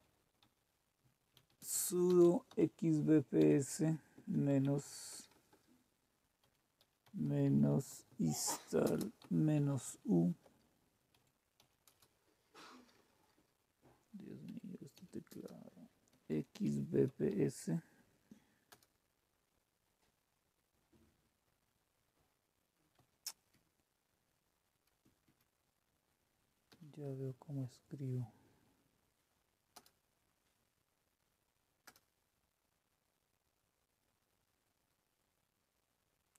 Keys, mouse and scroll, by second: 0.0-13.3 typing, 14.4-17.9 typing, 18.6 Return, 22.9 Up, 23.5-24.7 Left, 24.9 Left, 25.2 Left, 26.6 b, 26.9 Right, 27.6 Delete, 29.7 Return, 31.8 Return.